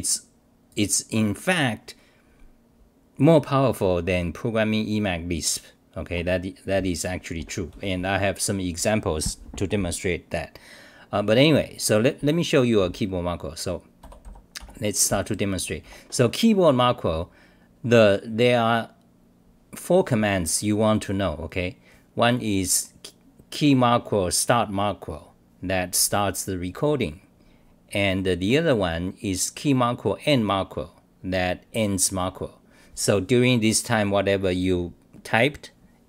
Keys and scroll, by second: 6.1 Home, 12.8-15.1 typing.